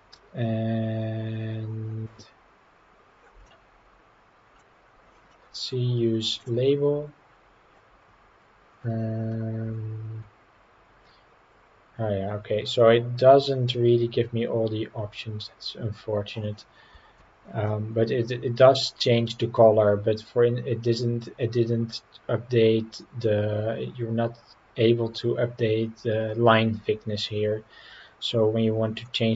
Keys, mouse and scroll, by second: 3.5-4.6 middle drag, 6.4 drag, 8.1 scroll down 2, 9.7-11.2 scroll down 4, 17.7-18.9 middle drag.